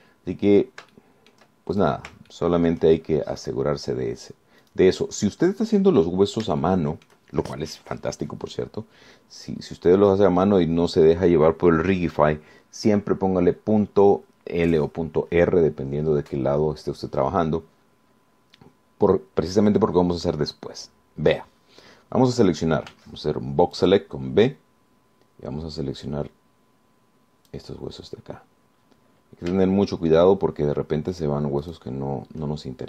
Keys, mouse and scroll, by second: 0.5 click, 2.1 shift+right click, 2.9 shift+right click, 3.5 shift+middle click, 4.6 click, 5.9 click, 6.7-7.1 scroll up 1, 7.2-7.7 scroll down 1, 7.8 shift+middle click, 10.3-10.7 scroll up 2, 10.8-11.7 scroll down 2, 24.1 b, 25.0-28.9 drag, 30.5 scroll up 2, 30.9 shift+click, 32.3 shift+right click.